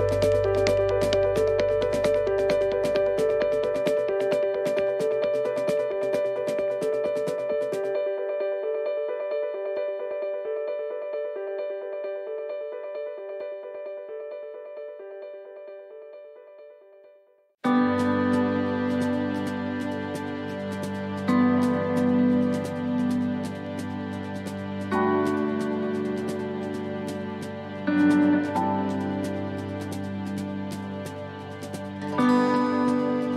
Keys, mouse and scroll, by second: 3.1 click, 4.2 middle click, 5.9 click, 12.7 click, 15.3 click, 15.3 middle click, 16.4 click, 18.2 middle click, 19.8 shift+middle click, 21.0 middle click, 22.0 shift+middle click, 22.5-22.9 scroll up 3, 22.9 middle click, 23.7 shift+middle click, 24.4 middle click, 27.7 middle click, 30.6 middle click, 31.5 click, 33.0 middle click.